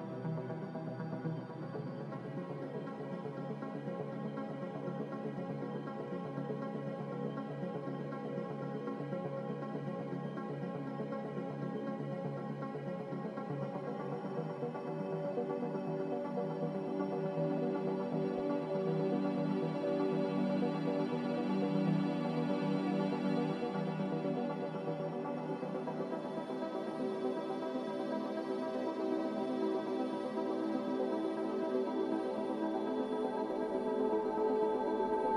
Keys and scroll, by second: 6.3-6.7 typing, 19.1 n, 21.1 z, 33.1-34.6 typing.